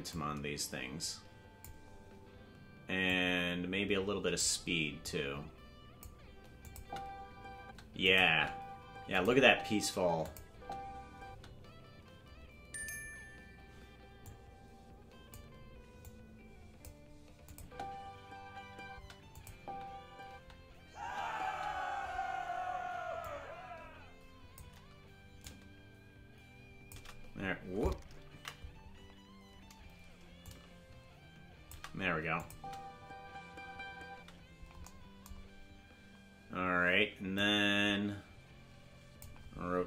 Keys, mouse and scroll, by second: 0.1-1.6 drag, 3.0-4.4 drag, 5.0-6.0 drag, 6.6 click, 6.7 space, 8.0 click, 8.0 space, 8.2 space, 9.1 click, 9.3 space, 10.2 click, 10.4 space, 14.2-15.3 drag, 16.0 click, 17.4-18.7 drag, 17.6 space, 19.3 click, 19.5 space, 23.2-24.6 drag, 25.4-27.0 drag, 28.9 ctrl+z, 30.4-31.7 drag, 32.3 click, 32.5 space, 34.7 space, 37.3-39.2 drag.